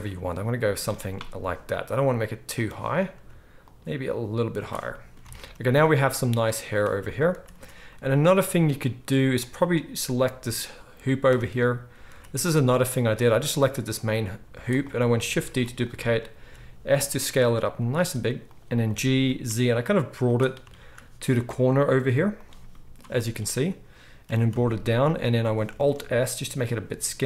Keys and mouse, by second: 5.3 alt+a, 7.3 ctrl+s, 7.5 ctrl+s, 9.4-27.2 middle drag, 11.2 Tab, 12.1 z, 14.4 z, 15.4 shift+d, 16.4 s, 18.8 g, 21.1 s, 24.2 g, 25.7 alt+s.